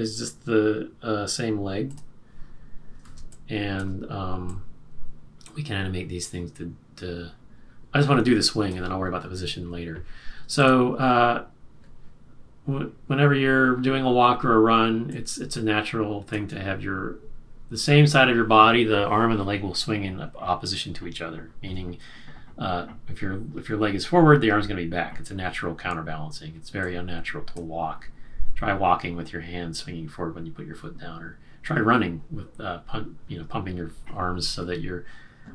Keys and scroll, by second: 3.1 space.